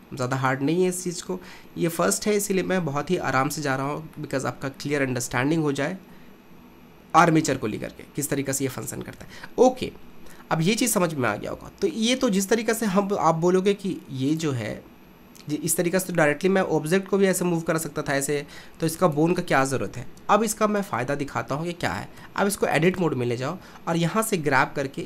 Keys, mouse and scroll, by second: 2.0 shift+middle click, 2.8-4.2 scroll down 2, 4.2-7.3 shift+middle drag, 9.2 ctrl+Tab, 14.3 click, 17.3 r, 20.8 click, 22.2 Tab, 22.9 click, 24.5 g.